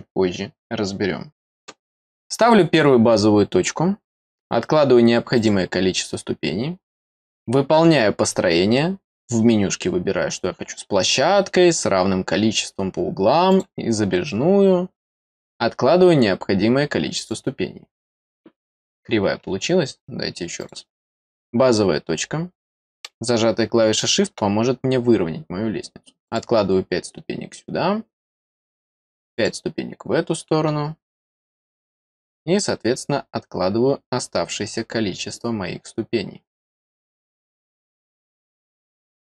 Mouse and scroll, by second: 2.4 click, 5.3 click, 13.4 click, 17.1 click, 20.5 click, 23.9 click, 26.2 click, 29.3 click.